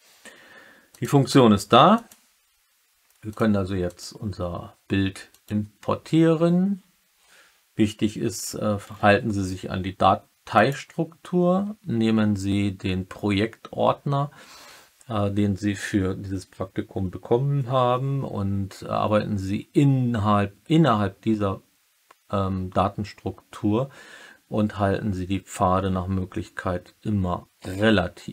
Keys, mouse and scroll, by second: 1.9-5.5 drag.